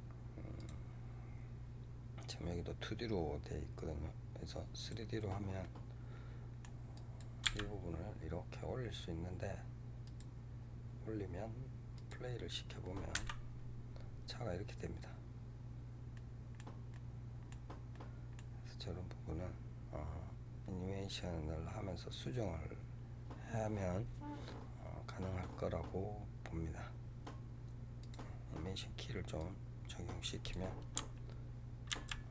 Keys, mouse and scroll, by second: 0.5 click, 4.7 click, 5.5-6.8 middle drag, 6.8 click, 7.3 g, 10.0 click, 11.8 click, 13.1 KP_0, 16.1 middle click, 16.9-20.9 middle drag, 28.0 click, 29.3-31.9 drag, 31.9 ctrl+z.